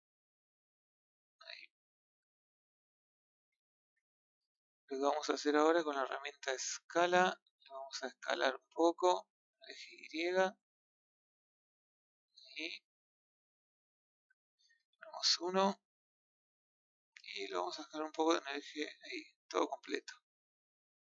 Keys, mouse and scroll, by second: 1.5-1.9 scroll down 2, 1.9-2.8 middle drag, 3.7 KP_1, 5.1-7.3 middle drag, 7.3 click, 8.7 click, 10.3-12.2 middle drag, 12.2 click, 13.6-14.9 middle drag, 14.9 KP_1, 18.0 click, 20.6-21.1 middle drag.